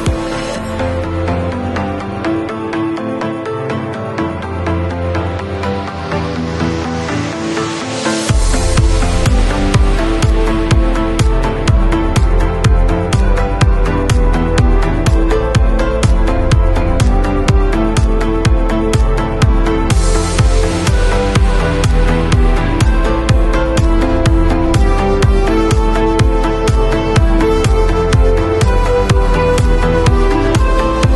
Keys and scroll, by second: 23.8 b, 24.9 ], 27.9 [.